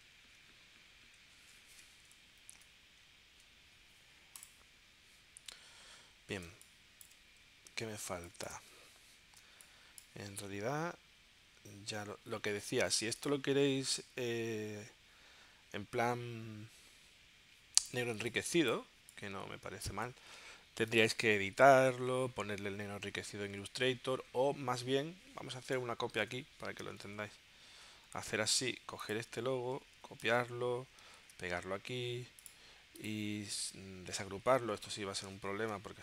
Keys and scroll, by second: 1.3 super+Tab, 2.4 Right, 6.5 space, 8.1 space, 9.4 space, 18.1 space, 26.3 BackSpace, 27.1 super+Tab, 29.9 super+c, 30.2 super+Tab, 31.2 super+v, 35.5 shift+super+g.